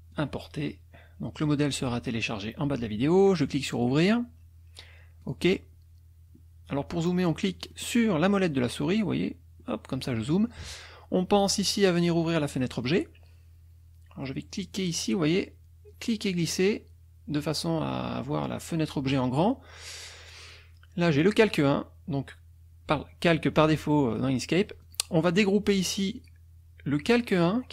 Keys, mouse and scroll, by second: 0.1 click, 1.3 click, 3.7 click, 5.2 click, 7.7 middle click, 8.3 middle click, 8.8 middle click, 9.6 middle click, 10.0 middle click, 11.5 click, 12.7 click, 15.9-17.5 drag, 21.2 click, 24.8 click, 26.2 click, 27.1 click.